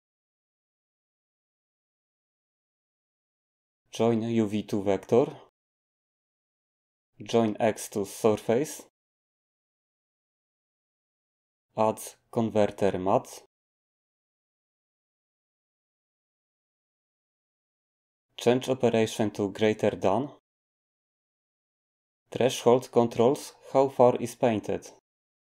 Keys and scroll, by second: 12.1 a.